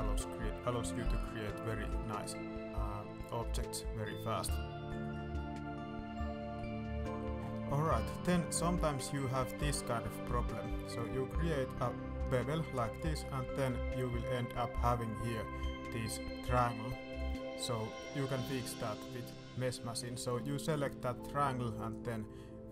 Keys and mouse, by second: 0.0 shift+Tab, 1.4 shift+Tab, 4.0 shift+middle click, 4.9 shift+middle click, 6.9 alt+middle click, 7.5 middle click, 8.0 shift+middle click, 8.4 middle click, 9.0 middle click, 9.5 ctrl+b, 13.3 middle click, 14.5 middle click, 17.0 click, 17.5 middle click, 17.8 shift+middle click, 18.2 middle click, 20.0 click, 20.6 click, 20.9 shift+middle click, 21.9-22.7 drag.